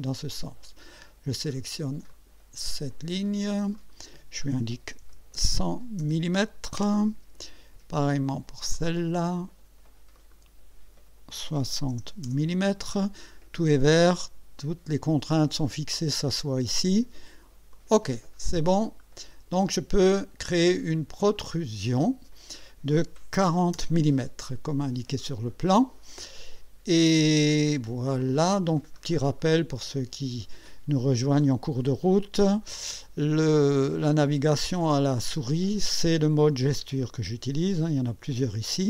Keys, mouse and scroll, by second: 2.1 click, 3.8 click, 5.1 1, 5.4 0, 6.8 Return, 8.8 click, 10.2 click, 11.6 6, 11.9 0, 12.3 Return, 17.8 click, 18.9-19.7 drag, 21.3 click, 23.5 4, 23.8 0, 28.2 click, 28.8-29.2 scroll down 2, 29.4-30.5 right drag, 34.2-35.4 drag, 37.2 click.